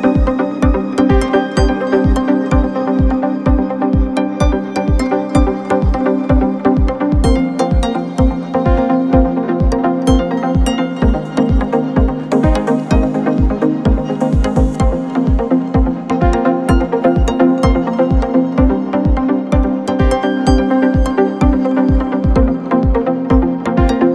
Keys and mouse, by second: 4.1 KP_1, 4.2 KP_3, 5.2-24.1 middle drag, 6.8 shift+d, 8.6 r, 9.9-11.5 drag, 10.6 g, 11.7 r, 19.3 shift+a, 20.7-24.1 drag.